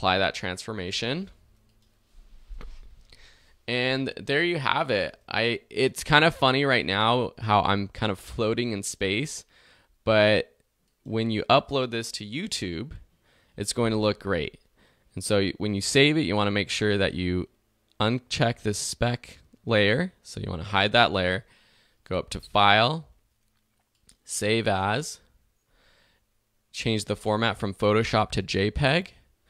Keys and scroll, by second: 4.6 alt+z, 5.9 alt+v.